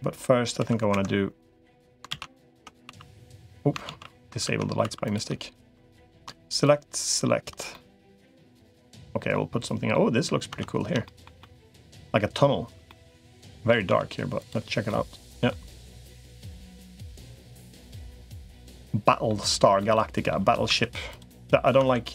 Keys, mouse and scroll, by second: 2.0 ctrl+z, 2.4 Tab, 2.8 2, 3.8 ctrl+z, 4.4 Tab, 4.8 2, 5.8 click, 7.5-9.7 middle drag, 10.4 Tab, 10.8 shift+middle click, 11.2 middle click, 12.7 shift+middle click, 13.8 z, 14.7 middle click, 15.9 middle click, 17.1-18.1 middle drag, 18.3 middle click, 19.3 shift+middle click, 19.7 middle click, 20.0 click, 20.6 Tab, 21.6 Tab.